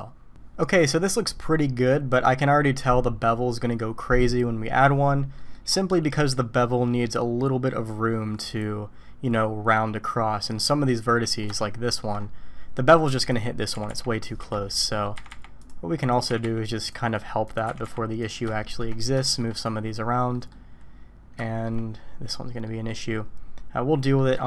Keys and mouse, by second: 5.4 middle click, 10.6 click, 11.3 middle click, 11.7 shift+middle click, 13.2 click, 13.8 g, 14.9 click, 15.2 g, 16.3 g, 17.6 click, 17.7 g, 18.7 shift+middle click, 19.3 shift+middle click, 20.4 click, 21.5 shift+click, 22.7 click, 24.2 middle click.